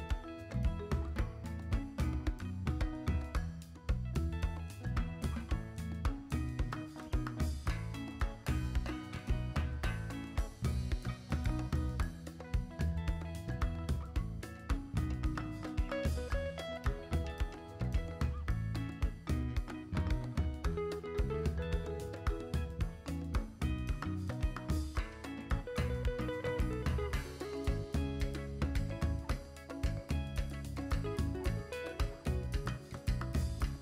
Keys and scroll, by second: 1.1 b, 5.8 x, 6.8 v, 17.0 b, 31.2 b.